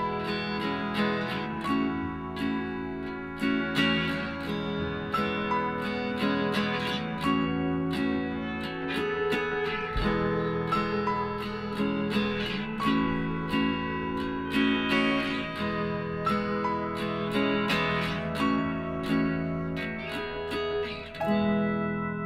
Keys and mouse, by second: 0.1 Tab, 1.3-2.9 right drag, 2.0 x, 3.3 x, 4.6 middle click, 6.4 a, 6.9 middle click, 7.1 KP_1, 9.3 s, 12.5 e, 19.9 r.